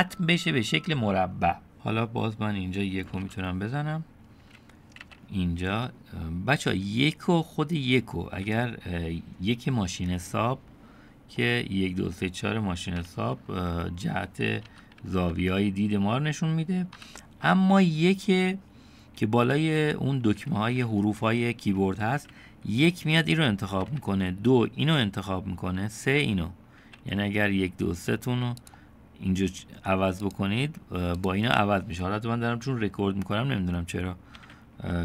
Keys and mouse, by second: 3.3 KP_1, 5.1 1, 11.4 middle click, 14.7 KP_1, 15.0 KP_3, 15.4 KP_7, 17.0 KP_1, 23.8 2, 26.8 3, 30.2 click, 31.3 click.